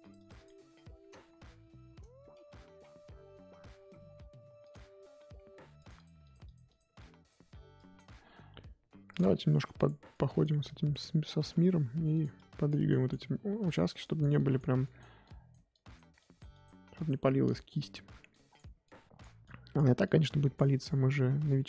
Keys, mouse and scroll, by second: 1.2 ctrl+z, 4.7 click, 5.3 f, 5.9-9.4 drag, 9.4 f, 10.1-11.7 drag, 11.7 f, 12.3-21.6 drag.